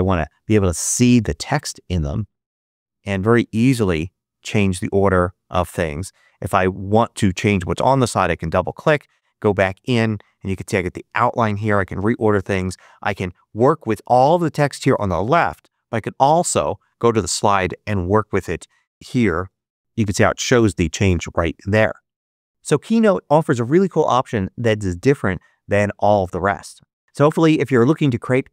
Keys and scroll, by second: 18.9 space, 19.3 shift+1.